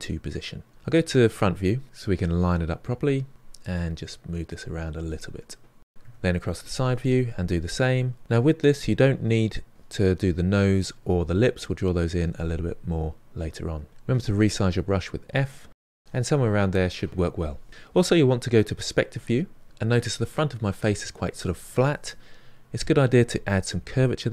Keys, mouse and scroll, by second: 1.0 KP_1, 1.7 ctrl+middle click, 2.0-5.9 drag, 5.9 KP_3, 7.2-10.5 drag, 12.5 f, 13.1-17.0 drag, 17.8-19.7 middle drag, 22.2-23.6 middle drag, 23.6 f.